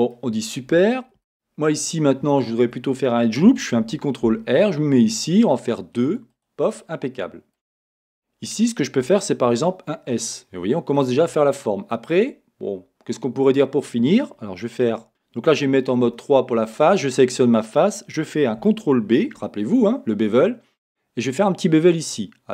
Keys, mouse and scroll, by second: 0.4 scroll up 1, 1.9-2.3 scroll up 1, 6.4 click, 6.8-9.5 middle drag, 8.1-9.5 scroll up 1, 9.5-12.2 drag, 9.5 s, 12.2-13.1 scroll, 15.1 a, 16.1 3, 16.8 click, 20.9 ctrl+b.